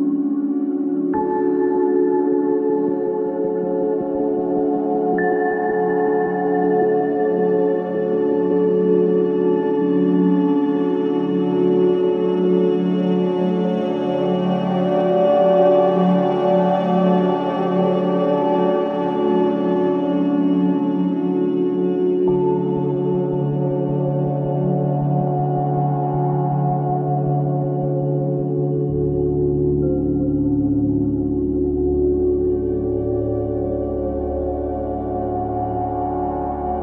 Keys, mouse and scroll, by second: 1.9 ctrl+z, 4.2-6.9 drag, 7.4 ctrl+z, 8.7 click, 10.7-13.6 alt+drag, 13.6-15.0 alt+drag, 15.0 alt+middle click, 15.6 alt+click, 16.0 alt+right click, 16.5 ctrl+z, 17.5-19.5 drag, 20.1-22.4 alt+drag, 22.4 alt+right click, 22.6 alt+click, 23.1 alt+middle click, 23.3 alt+right click, 23.9 alt+click, 24.3 alt+right click, 24.6 alt+click, 25.0 alt+right click, 25.8 alt+middle click, 26.1 alt+right click, 27.4 alt+click, 28.4 alt+right click, 28.8-30.2 alt+drag, 30.2 alt+right click, 30.9 alt+click, 31.4 alt+right click, 31.7 alt+click, 32.1 alt+right click, 32.5-34.5 alt+drag, 35.0 alt+click, 35.7 alt+right click, 36.0 alt+click.